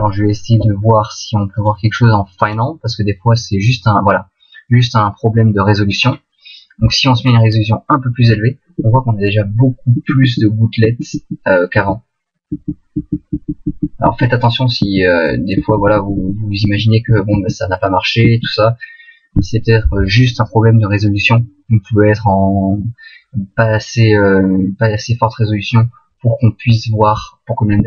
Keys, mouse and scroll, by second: 4.2 click, 9.6 Left, 10.8 Left, 11.5 Left, 12.1 Left, 12.6 Left, 13.1 Left, 13.3 Left, 13.6 Left, 14.0 Left, 14.3 Left, 15.1 Right, 15.8 Left, 15.9 Left, 16.1 Left, 16.2 Left, 16.7 Right, 17.2 Right, 17.5 Right, 18.5 Right.